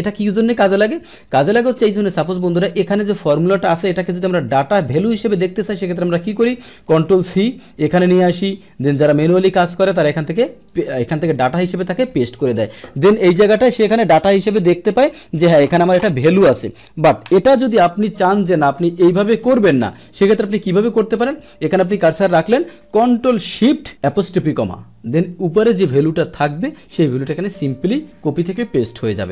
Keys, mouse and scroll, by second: 2.1 click, 6.9 ctrl+c, 7.9 click, 9.0 click, 10.7 click, 19.9 click, 20.9 Delete, 21.3 click, 25.2 Return, 26.1 Return, 27.4 click.